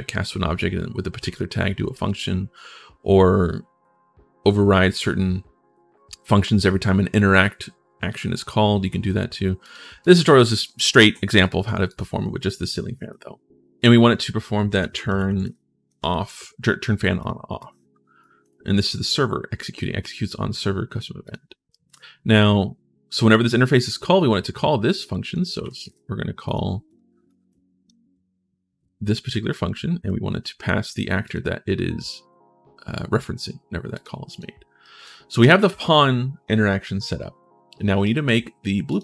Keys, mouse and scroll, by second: 9.4 click, 9.8 click, 10.1 click, 11.2 click, 11.7 click, 12.7 right click, 13.6 click, 14.6 t, 14.9 r, 15.1 space, 17.0 click, 17.4 click, 18.2 click, 18.9 click, 21.0 click, 21.5 right click, 24.9 click, 25.1-25.9 typing, 26.2 click, 26.6 click, 27.2 click, 29.8 click, 31.0 click, 33.7 click, 34.1 click, 34.6 right click, 37.8 right click, 38.6 click.